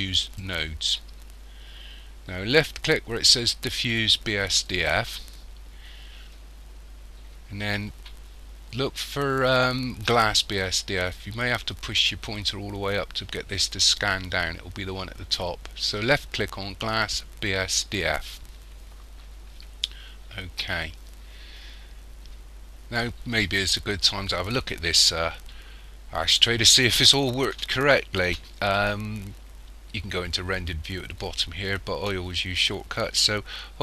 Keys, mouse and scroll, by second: 0.0 click, 4.7 click.